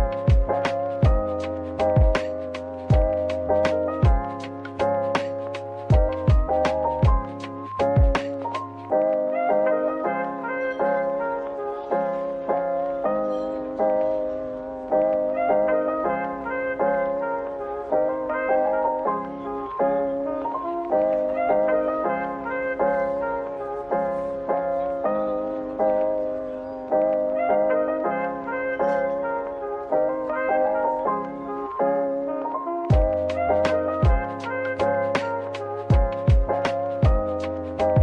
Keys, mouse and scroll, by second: 2.9 scroll up 1, 20.1 typing, 21.9-22.2 typing, 24.0 typing.